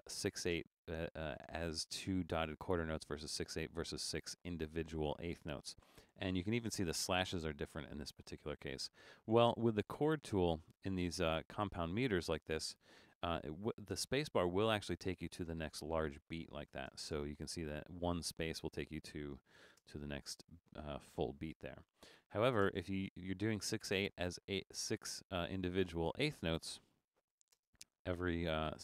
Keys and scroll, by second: 13.3 shift+d, 13.9 space, 15.7-17.4 typing, 19.6 shift+g, 19.8 space, 21.3 shift+a, 22.6 space, 27.3 shift+d, 27.6 space.